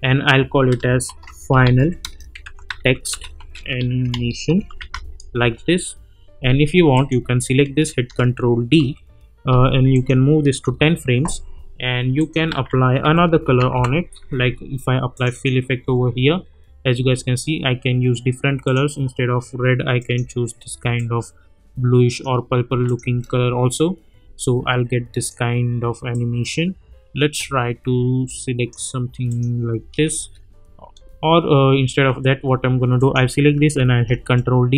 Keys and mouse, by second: 0.8-5.4 typing, 6.9 click, 7.8 ctrl+d, 8.8 =, 9.9 click, 10.6 [, 12.2 click, 12.5 ctrl+a, 12.8-14.2 typing, 15.1 click, 15.8 space, 18.6-22.2 drag, 23.0 space, 25.2-28.9 drag, 29.7 space, 32.9 click, 33.9 ctrl+d, 34.3-34.7 drag.